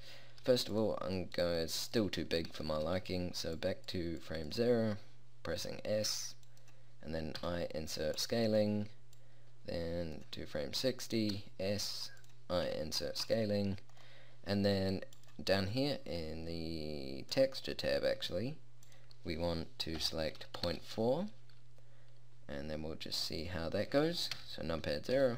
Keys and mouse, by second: 5.8 s, 7.5 i, 11.4 s, 12.8 i, 24.5 KP_0.